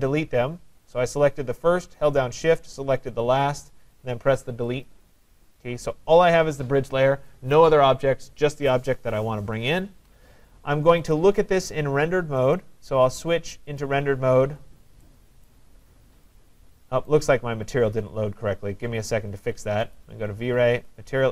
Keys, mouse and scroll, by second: 4.9 click, 11.1 click, 12.6 click, 13.8 click, 15.5 right click, 15.8 middle click, 15.9 middle click, 16.0 middle click, 17.1 right click, 20.0 click, 20.9 click.